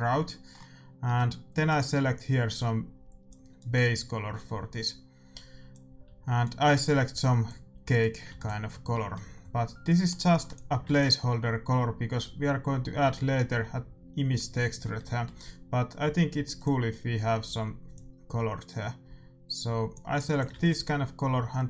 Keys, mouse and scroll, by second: 1.6-3.5 drag, 8.0-9.9 drag, 8.3 ctrl+s, 8.8-11.5 middle drag, 10.4-13.4 drag, 10.8 ctrl+s, 14.9-16.7 middle drag, 16.5-18.3 drag, 20.4 ctrl+s.